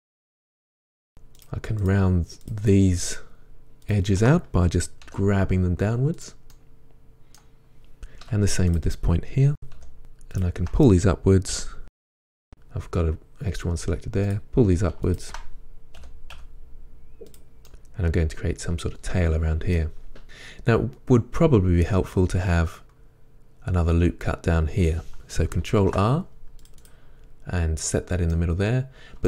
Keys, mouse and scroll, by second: 0.8 2, 0.9 click, 1.1 shift+click, 5.1 g, 6.3 click, 6.6-8.8 middle drag, 8.3 1, 8.8 click, 9.8 g, 10.4-11.3 middle drag, 11.3 shift+click, 11.8 g, 12.4 right click, 14.3 click, 15.1 shift+click, 16.0 g, 17.4 click, 17.7-26.9 middle drag, 20.0 scroll down 2, 25.8 ctrl+r, 26.9-27.9 drag, 27.9 middle click.